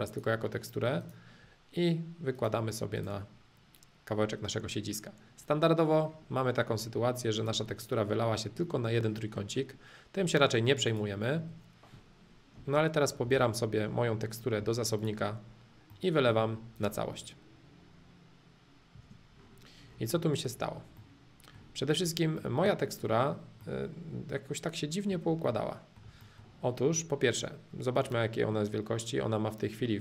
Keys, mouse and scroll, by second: 0.0-2.0 drag, 2.3-4.3 drag, 6.0 middle click, 7.3 click, 10.2 middle click, 10.8-12.8 drag, 13.2 b, 14.9-15.9 drag, 15.9 middle click, 16.7-18.7 drag, 18.9 space, 19.4 middle click, 20.5 middle click, 21.9 click, 22.3 middle click, 23.7-25.2 middle drag, 25.5-28.0 shift+middle drag, 28.0-30.0 drag.